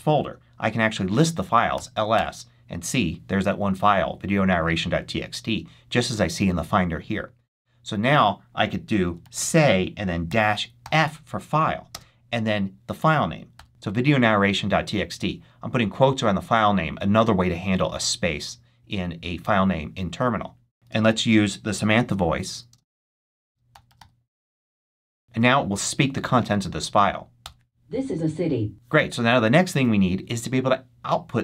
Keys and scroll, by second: 1.3 l, 1.6 s, 2.0 Return, 8.7-10.7 typing, 11.8 space, 13.4 shift+', 20.8-24.3 typing, 27.3 Return.